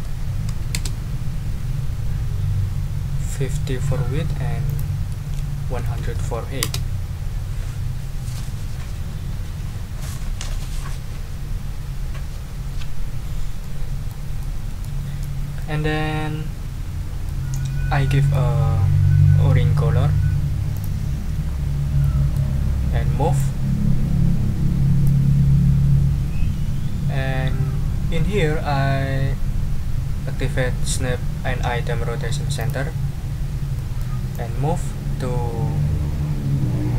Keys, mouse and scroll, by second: 0.0-0.4 typing, 0.7 Return, 4.6 ctrl+click, 5.1 ctrl+a, 5.6-6.5 typing, 6.6 Return, 13.6 click, 14.4 click, 14.7 middle click, 15.6-17.4 middle drag, 17.5-18.5 middle drag, 20.7 click, 21.4 ctrl+scroll up 2, 22.0 ctrl+click, 22.5 ctrl+scroll up 2, 23.3-25.2 drag, 32.6 click, 33.7 click, 34.3-36.9 drag.